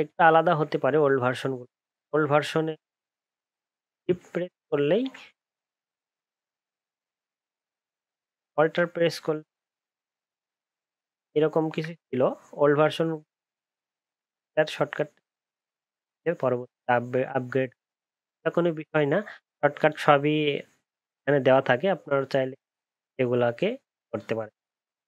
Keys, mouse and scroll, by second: 0.2 ctrl+t, 4.9 ctrl+t, 6.0 shift+click, 8.6 ctrl+z, 10.0 alt+click.